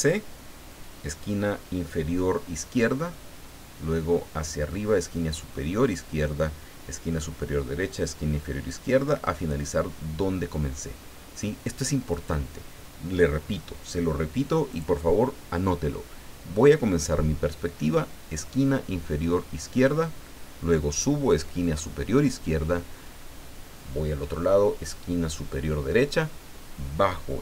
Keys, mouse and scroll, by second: 12.1 click, 14.7 click.